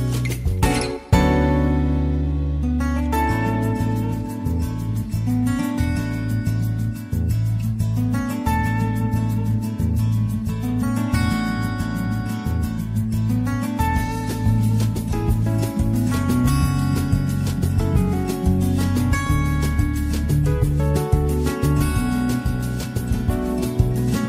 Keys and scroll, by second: 4.3 z, 4.6 <, 5.7 z, 7.0 ctrl+v.